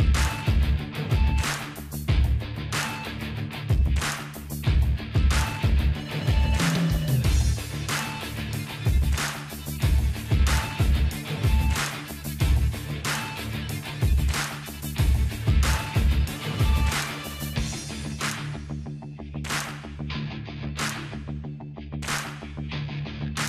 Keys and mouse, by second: 0.0 middle click, 3.0-4.6 middle drag, 4.7-6.5 middle drag, 6.9-7.9 middle drag, 7.9-9.2 drag, 8.1-9.2 right drag, 9.2 ctrl+b, 12.4-14.5 drag, 12.4-14.5 right drag, 12.4 KP_0, 13.6-15.5 middle drag, 15.5 click, 15.9 alt+h, 16.3 middle click, 16.8 click, 17.1-18.5 middle drag, 18.5-19.5 drag, 19.2-20.8 middle drag, 20.2 s.